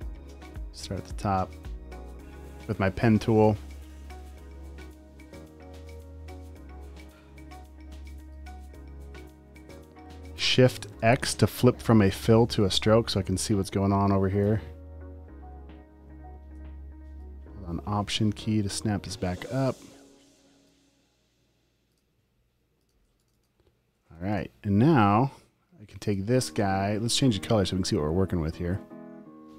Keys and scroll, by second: 3.7 space, 4.1 space, 11.0 x, 20.1 space, 20.6 super+space, 22.5 space, 22.9 space, 24.0 alt+space, 24.3 v, 26.7 x.